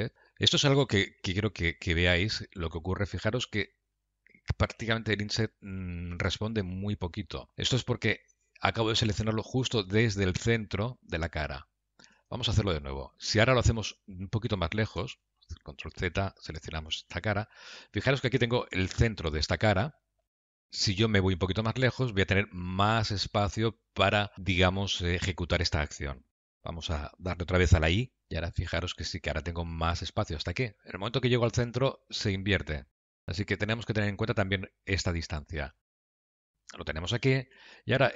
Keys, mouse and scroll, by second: 15.6 ctrl+z, 16.5 click, 18.9 middle click, 20.3 scroll down 1, 20.5 scroll up 1.